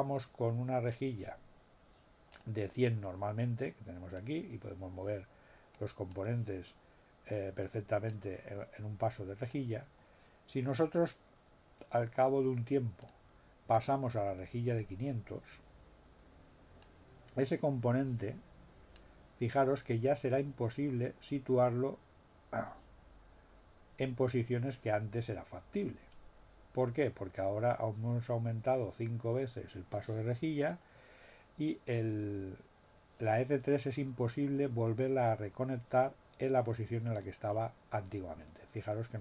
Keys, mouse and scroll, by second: 2.3 click, 4.2-5.9 drag, 6.1-9.7 drag, 13.0 click, 14.6 click, 16.8-30.8 drag, 31.9-39.2 drag.